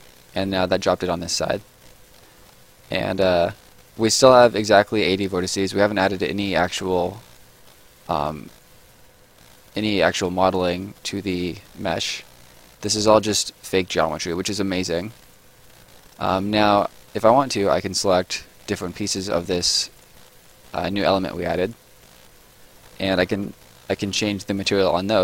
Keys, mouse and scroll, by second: 1.1-1.7 scroll up 1, 1.7 right click, 2.1-2.7 scroll up 1, 2.7 middle click, 3.0-3.4 scroll up 1, 3.4 right click, 4.3 scroll down 1, 4.6 right click, 5.0 middle click, 6.0 right click, 7.5 middle click, 8.0 right click, 10.0 middle click, 10.4 right click, 10.9-11.3 scroll up 1, 11.3 middle click, 11.5 right click, 13.7 right click, 17.2-17.6 scroll up 1, 18.1 click, 18.6 middle click, 19.1-19.5 scroll up 1, 19.5 click.